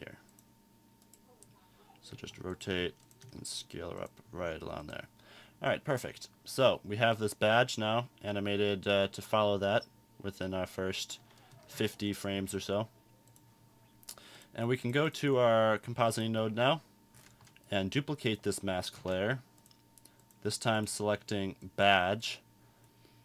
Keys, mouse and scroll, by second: 9.0-9.7 drag, 10.3 click.